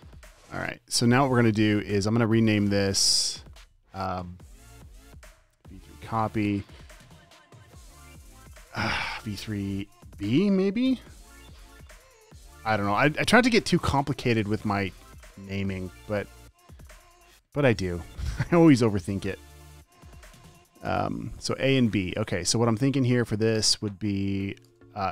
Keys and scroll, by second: 0.0-1.6 typing, 11.8 b, 19.0-19.9 typing, 24.6 space, 25.0 v.